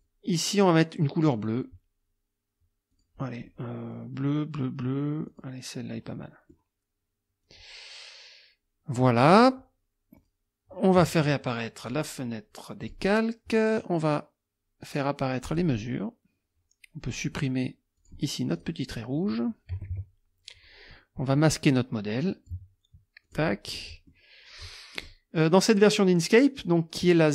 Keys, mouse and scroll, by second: 2.9 click, 3.5 middle click, 5.3 click, 6.1 middle click, 7.4 click, 10.2 click, 11.8 click, 12.8 click, 15.4 click, 18.0 click, 18.6 click, 18.8 click, 19.7 F1, 19.9 Delete, 22.2 click, 23.2 click, 23.8-24.3 scroll up 1, 24.5 click, 25.0 middle click.